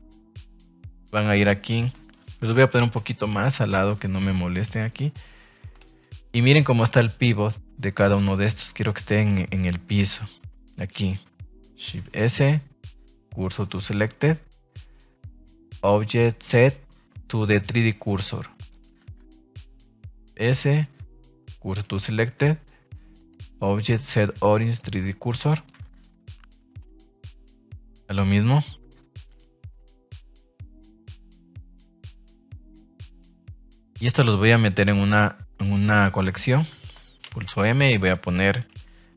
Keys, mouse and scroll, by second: 0.3-0.9 middle drag, 1.3 ctrl+s, 1.7 middle click, 2.5 KP_1, 2.9 a, 3.1 a, 3.7 b, 5.1 click, 5.9 shift+middle drag, 6.4 shift+middle drag, 8.1-9.1 shift+middle drag, 8.2-8.7 shift+scroll down 1, 9.6 right click, 10.0 Tab, 14.2 Tab, 15.8-17.9 drag, 18.7 right click, 19.0 Tab, 21.8 shift+s, 22.2 Tab, 23.1-25.0 drag, 25.4 right click, 28.0 Tab, 29.1-30.7 drag, 31.7 Tab, 32.0 middle drag, 32.6 ctrl+s, 33.0 KP_3, 33.4 KP_1, 33.9 ctrl+s, 34.7 right click, 35.1 shift+right click, 35.6 right click, 36.0 shift+right click, 36.3 shift+right click, 37.2 m.